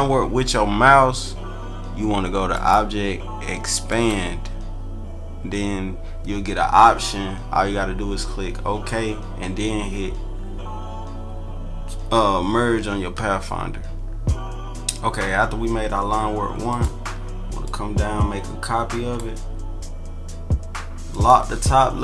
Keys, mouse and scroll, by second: 2.5 click, 3.9 click, 16.6 click, 17.6-19.2 drag, 21.1 click.